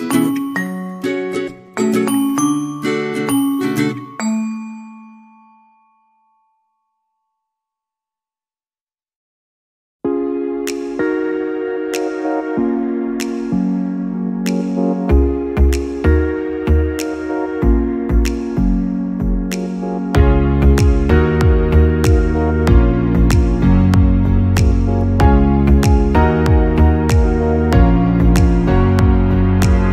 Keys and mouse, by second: 0.6 right click, 1.0 c, 1.8 g, 4.8 right click, 5.0 g, 6.4 Tab, 7.3-8.1 middle drag, 8.4-9.9 middle drag, 10.2 Tab, 10.3 middle click, 11.1 middle click, 12.4 right click, 12.9 g, 15.9 Tab, 16.2-16.7 middle drag, 17.0 middle click, 17.5 Tab, 17.8 shift+middle click, 18.2 middle click, 19.3 g, 20.7 g, 21.2 KP_1, 22.4 right click, 22.7 g, 24.3 g, 25.2 Tab, 26.0 Tab, 26.3 right click, 26.8 g, 27.6 KP_3, 28.2 KP_1, 29.1 right click, 29.6 g.